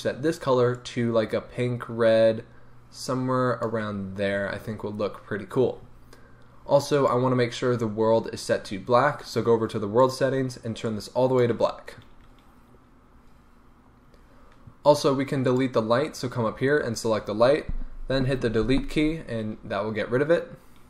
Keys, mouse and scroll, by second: 7.0 click, 10.0 click, 13.6 scroll down 1, 15.5 click, 18.6 Delete.